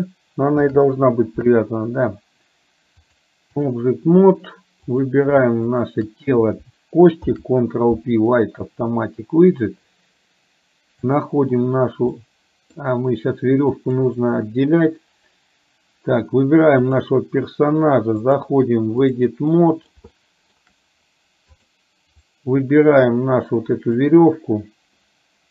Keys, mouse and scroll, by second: 0.6 ctrl+p, 3.1 click, 5.1 click, 5.7 shift+click, 7.4 ctrl+p, 11.1 click, 12.2 middle click, 13.7 click, 16.9 click, 18.2-19.4 drag, 19.6 middle click, 20.2 shift+middle click, 21.6 click, 22.5-24.1 drag.